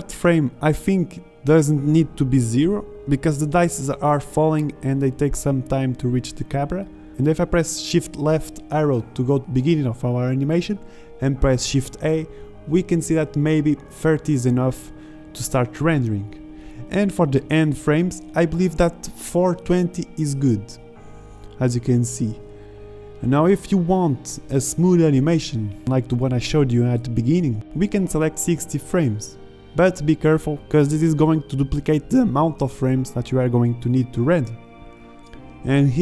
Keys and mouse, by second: 0.8 shift+z, 2.9 shift+Left, 3.8 alt+a, 8.5 alt+a, 9.0 alt+a, 12.2 alt+a.